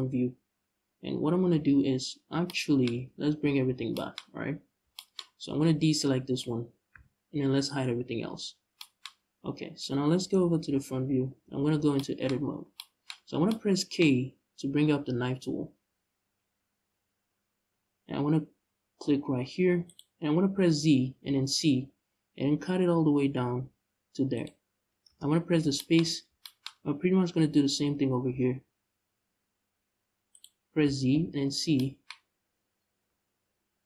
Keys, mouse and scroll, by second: 0.5-1.2 scroll up 2, 1.2 z, 1.4 click, 1.9 scroll down 1, 2.7 ctrl+z, 3.3 z, 6.6 shift+l, 7.8 h, 9.0-10.3 scroll up 1, 10.3 KP_1, 11.1 z, 12.1-12.4 scroll up 1, 14.7 k, 24.9 space, 25.1-25.5 scroll down 1, 25.9 scroll up 1, 26.4-28.0 scroll up 1, 28.0 k, 32.5-33.4 scroll down 1, 33.4 middle click, 33.7-33.8 middle drag.